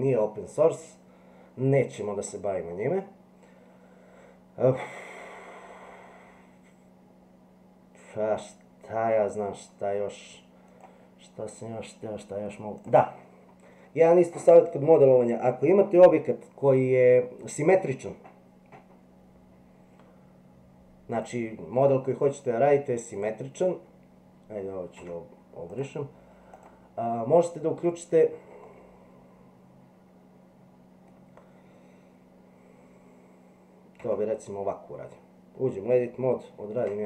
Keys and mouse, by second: 10.9 click, 21.1 click, 23.2 click, 25.0 x, 28.7-31.1 middle drag, 34.0 Tab, 36.6 ctrl+r.